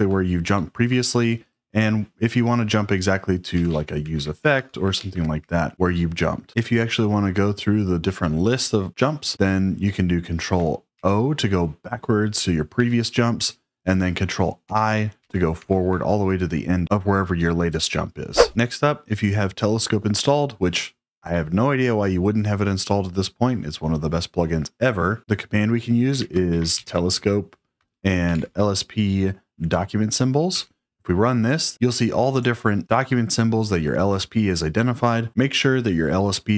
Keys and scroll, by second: 0.3 ctrl+p, 3.2-5.7 typing, 10.9 ctrl+o, 12.7 ctrl+o, 14.6 ctrl+i, 15.1 ctrl+i, 15.5 ctrl+i, 25.9-28.9 typing, 29.7 Tab, 30.5 Return.